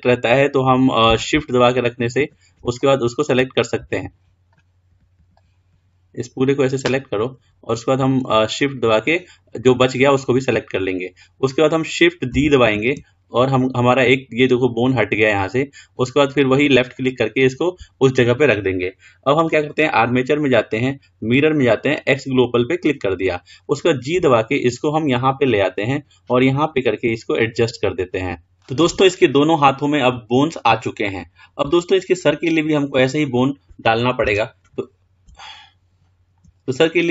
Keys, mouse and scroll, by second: 3.0 shift+click, 4.7 click, 5.6 click, 8.6 shift+click, 12.8 shift+d, 19.6-22.4 drag, 24.4 g, 31.3-32.0 scroll up 2, 32.0-33.4 middle drag, 33.4-34.4 scroll up 4, 34.4 KP_1, 35.6-37.1 shift+middle drag.